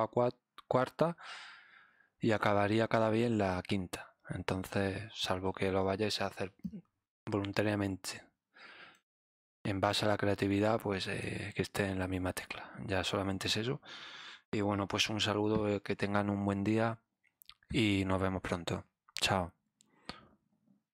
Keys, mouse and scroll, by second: 5.4 ctrl+Num_Lock, 5.6 click, 6.6-8.9 drag, 9.8-11.2 drag.